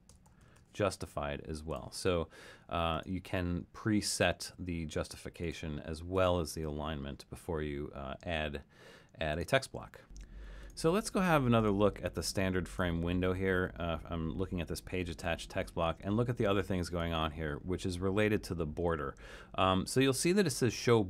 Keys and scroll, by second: 0.0-1.0 typing.